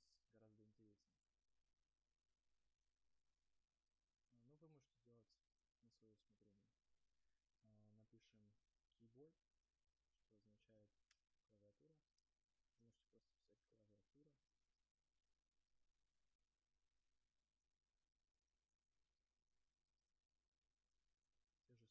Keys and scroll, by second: 0.5 space, 11.3 Return, 12.4 space.